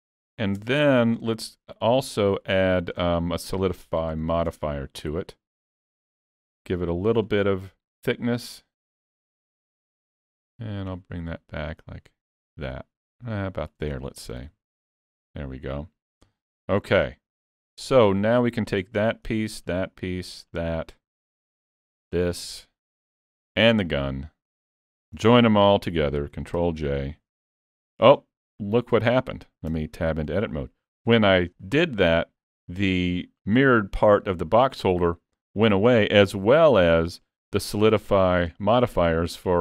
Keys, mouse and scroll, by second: 0.7 Tab, 1.0 middle click, 2.3 click, 3.4 middle click, 5.9 click, 8.7 click, 9.5 shift+click, 14.5 alt+a, 14.9-15.6 scroll down 3, 15.1 Tab, 15.7 middle click, 16.3 Tab, 16.7 alt+a, 16.9 scroll down 4, 17.8 scroll up 1, 18.6 scroll up 1, 18.7 click, 19.6 shift+click, 26.6 ctrl+j, 28.1 middle click, 29.7 Tab, 30.3 middle click, 35.4 middle click, 36.4-36.9 scroll up 2, 36.7 middle click.